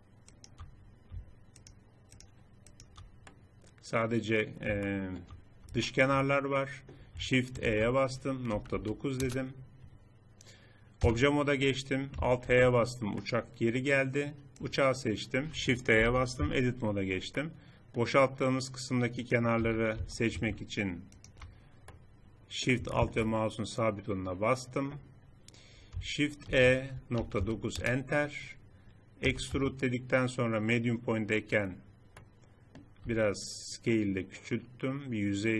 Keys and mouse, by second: 0.5-4.3 middle drag, 7.4 shift+e, 10.8 Tab, 12.3 alt+h, 16.3 Tab, 19.3 a, 19.7 a, 21.7 middle click, 26.3 shift+e, 28.3 middle click, 28.5 middle click, 29.1 e, 32.8 s.